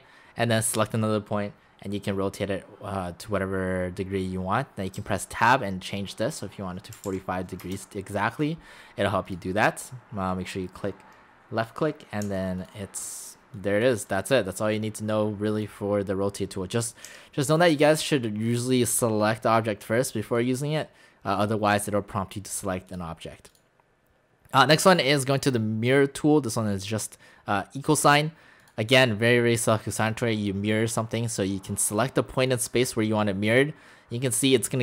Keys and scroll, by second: 5.0 Tab, 7.0 typing, 7.6 Return, 12.2 x, 17.1 x.